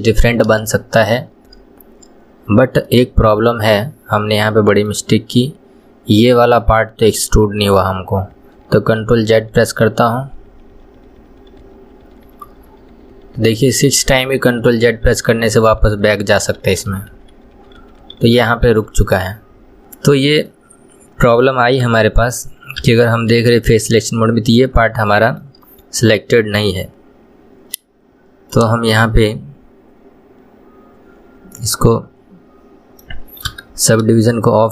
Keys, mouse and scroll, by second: 0.3-0.8 scroll up 2, 0.8-6.0 shift+middle drag, 6.5-6.8 scroll up 1, 6.8-7.4 middle drag, 7.4-9.3 scroll up 1, 9.3-10.4 ctrl+z, 19.4-19.8 scroll up 1, 20.7-22.0 middle drag, 22.0 KP_3, 23.0 Tab, 25.3-28.3 shift+middle drag, 28.7 click, 31.7-33.7 middle drag, 33.7 KP_3, 34.4-34.7 shift+middle drag.